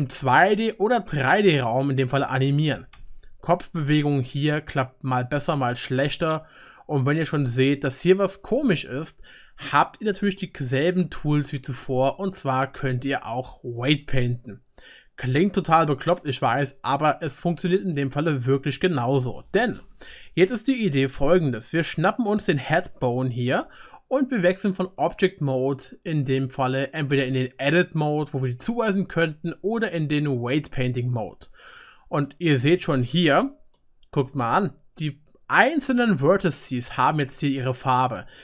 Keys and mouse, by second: 2.7 r, 8.7-11.8 drag, 13.8-19.0 drag, 22.4 click, 23.4-32.8 middle drag, 23.4-28.2 right drag, 24.8-28.2 drag, 32.3 click, 32.3 right click, 32.5 drag, 32.5 right drag, 32.7 click, 32.7 right click, 33.2-34.2 shift+middle drag, 33.8-34.1 shift+drag, 33.8-34.1 shift+right drag, 34.2 shift+click, 34.2 shift+right click, 34.4 middle click.